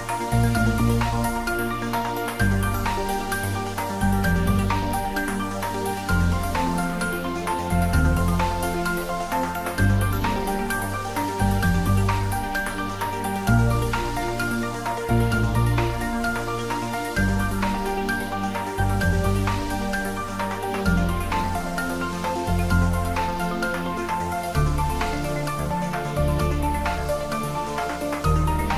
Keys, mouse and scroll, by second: 0.9 click, 4.0 scroll up 1, 5.1-7.0 middle drag, 7.0 scroll down 1, 7.9 middle click, 8.6 ctrl+z, 9.4 g, 9.9 z, 12.4 click, 12.8 scroll down 1, 13.9-14.3 scroll up 1, 14.8-15.2 scroll down 1, 15.2-19.7 middle drag, 19.7-20.1 scroll up 1, 20.5-20.9 scroll up 1, 20.9-23.5 middle drag, 23.5 click, 24.5 middle click, 25.5-25.9 scroll down 1, 27.6 scroll down 1, 28.3 e.